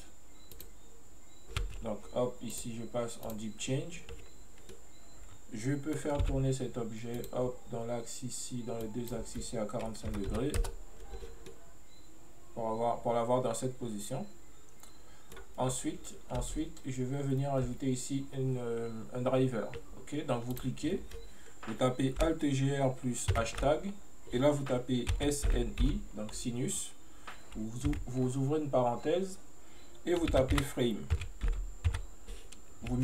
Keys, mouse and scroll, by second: 1.7 space, 2.6-4.8 drag, 4.8-6.3 middle drag, 6.3 n, 7.2-11.6 drag, 11.6-16.4 middle drag, 20.6-23.6 drag.